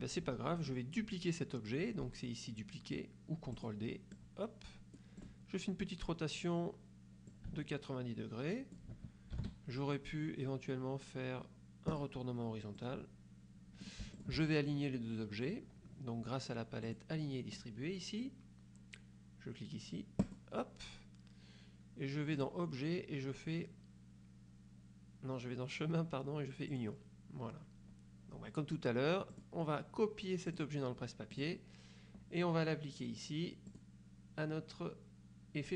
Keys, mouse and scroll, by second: 3.7 click, 4.3-5.5 drag, 7.4-9.1 ctrl+drag, 9.5 ctrl+z, 12.0 click, 12.9-14.1 drag, 14.3 shift+click, 16.9 click, 20.3 click, 22.5 click, 26.8 click, 29.5 click, 30.6 click, 31.5 click, 33.8 click.